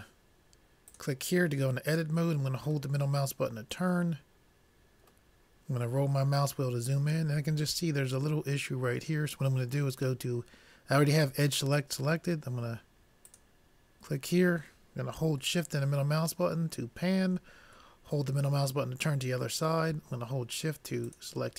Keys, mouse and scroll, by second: 0.9-2.8 drag, 3.5-5.1 middle drag, 6.0-8.4 middle drag, 13.6-15.3 drag, 15.9-18.9 middle drag, 21.1-21.5 drag.